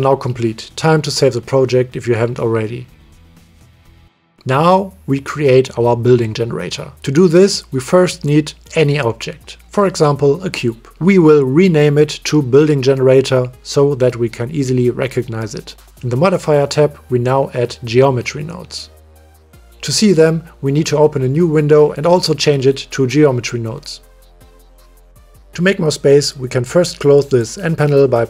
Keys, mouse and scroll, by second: 0.4 middle click, 0.6 middle click, 1.2 click, 1.7 ctrl+s, 2.8-3.9 drag, 7.1 shift+a, 12.0 click, 12.1-15.3 drag, 18.1 click, 21.0-22.8 drag, 23.5-24.3 drag, 25.5 click, 26.3-27.7 drag.